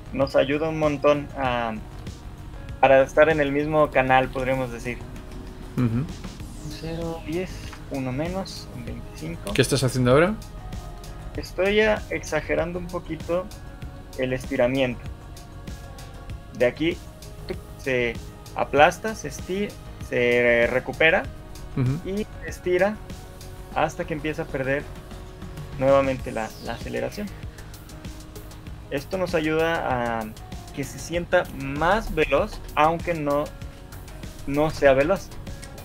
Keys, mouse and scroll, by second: 2.3 ctrl+c, 7.3 shift+Up, 7.7 Left, 9.3 ctrl+v, 10.1 ctrl+z, 11.9 click, 12.5 shift+d, 15.5 right click, 21.6 right click, 33.2 alt+a.